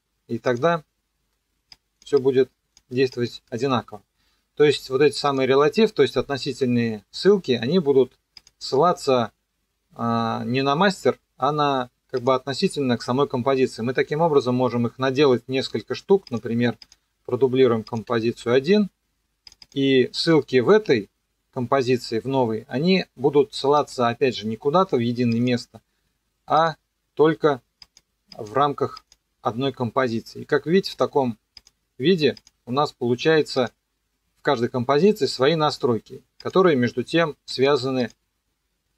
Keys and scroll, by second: 18.3 ctrl+d.